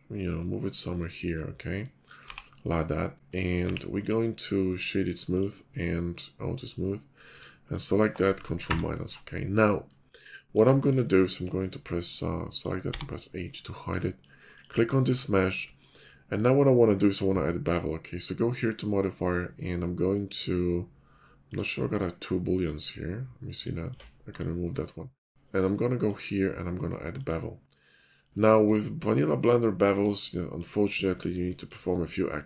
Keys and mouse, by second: 1.5-1.9 middle drag, 2.2 g, 3.6 g, 6.6 click, 7.5-8.0 shift+middle drag, 8.7 ctrl+KP_Subtract, 12.9 h, 13.7 shift+middle drag, 15.2 shift+middle click, 21.5 click, 21.5 middle click, 21.5 right click, 21.8 click, 23.5 click, 23.9 click, 24.3-26.0 drag, 27.2-27.9 drag, 28.0 shift+middle drag, 29.1 shift+middle click, 30.4 shift+middle click.